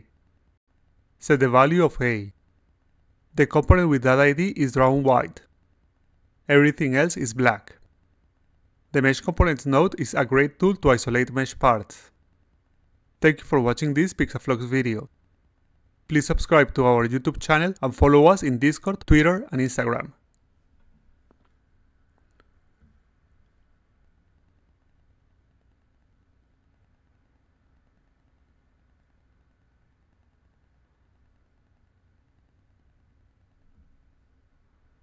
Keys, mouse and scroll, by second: 0.5 click, 2.1 click, 2.9 1, 5.2 2, 6.3 3, 7.5 4, 8.7 5, 9.8 6.